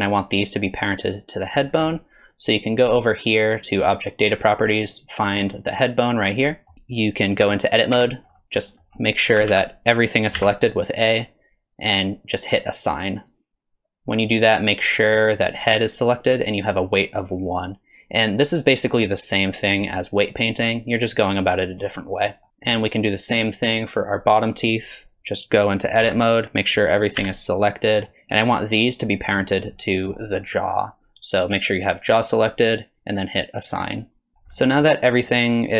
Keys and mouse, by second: 1.7 middle click, 4.0 click, 5.5 click, 6.5 middle click, 8.0 Tab, 8.7 middle click, 9.5 alt+z, 10.4 a, 13.3 click, 22.5 Tab, 23.9 click, 26.0 Tab, 27.2 a, 29.8 click, 32.1 click, 34.0 click, 34.6 middle drag.